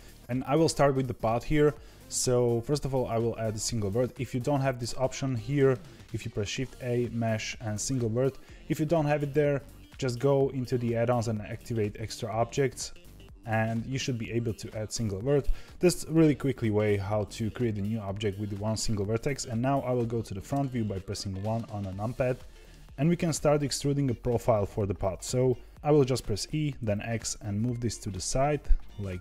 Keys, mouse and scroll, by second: 4.6 shift+a, 20.5 KP_1, 22.3 shift+middle click, 22.8-23.3 scroll up 2, 26.4 e.